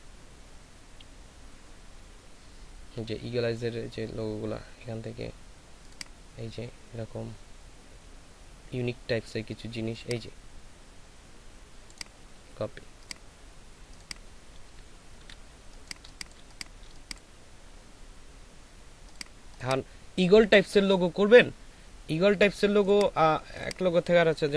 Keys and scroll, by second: 15.2 ctrl+v, 15.6 ctrl+space, 16.3 ctrl+space.